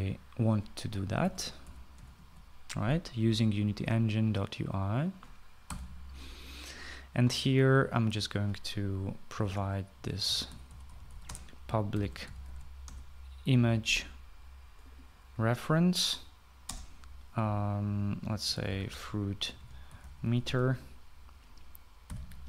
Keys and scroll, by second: 1.9-3.4 typing, 6.6 ;, 10.3 Return, 10.5 Return, 11.0-14.0 typing, 17.6 space, 19.2-22.4 typing.